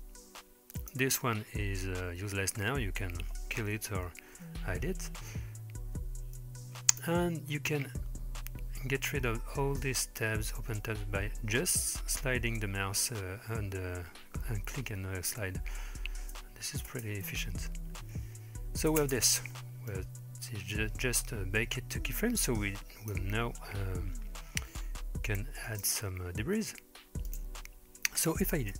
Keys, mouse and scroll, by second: 0.8 click, 2.7 middle click, 4.4 h, 6.4-7.1 drag, 7.9-9.2 scroll up 3, 9.2 scroll up 3, 10.8-13.1 drag, 16.9 space, 19.1 space, 19.9-23.2 drag, 25.7 click, 27.3 click.